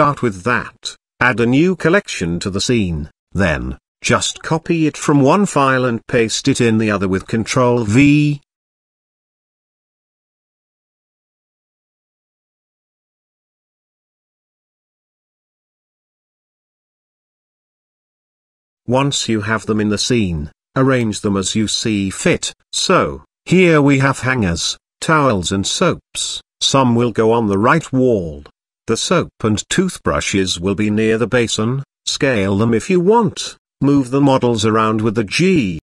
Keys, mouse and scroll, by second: 0.0 click, 1.1 click, 1.2-5.5 drag, 2.7 c, 3.1 s, 9.3 click, 11.7 click, 12.9 ctrl+v, 14.3 KP_7, 15.4 g, 16.7-17.3 scroll up 1, 17.3 scroll up 1, 18.2-18.6 shift+middle drag, 18.8-19.2 middle drag, 19.2-19.6 shift+middle drag, 21.5 r, 24.8 middle click, 25.4-25.7 shift+middle drag, 26.4-27.2 drag, 28.0 KP_7, 28.8 shift+middle drag, 29.1 z, 29.9 g, 32.8 KP_3, 33.9 g.